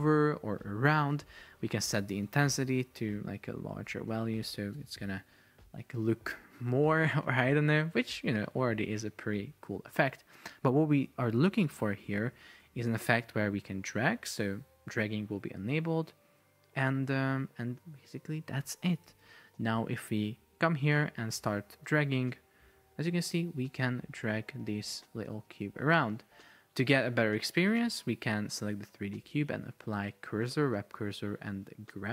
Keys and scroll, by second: 2.9 shift+Up, 3.6 Down, 4.8 super+p, 10.0 Escape, 12.6 Return, 19.3 super+p, 26.4 Escape.